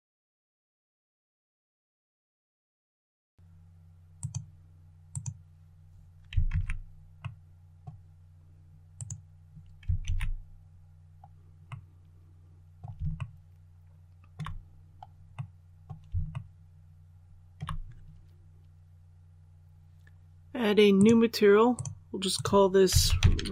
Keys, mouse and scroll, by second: 0.1 middle click, 0.4 shift+right click, 0.8 shift+scroll down 1, 1.1-1.4 shift+scroll up 2, 1.2 shift+middle click, 1.7 scroll down 1, 1.7 middle click, 2.2 shift+right click, 2.3 shift+right click, 2.9 shift+right click, 4.1 click, 6.4 alt+a, 7.1 middle click, 8.8 right click, 9.9 alt+a, 10.8-11.5 scroll down 1, 11.5-12.7 middle drag, 13.0 shift+middle click, 14.7 scroll down 1, 15.2 middle click, 16.2 shift+middle click, 20.8 click, 22.9-23.5 typing.